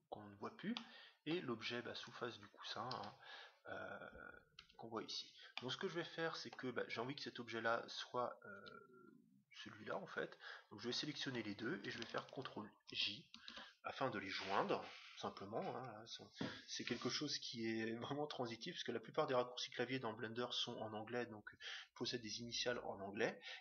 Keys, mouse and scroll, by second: 0.7-2.3 middle drag, 1.9-3.5 right drag, 2.9 g, 5.5-7.3 middle drag, 10.8-12.4 right drag, 12.6 right click, 12.9 ctrl+j.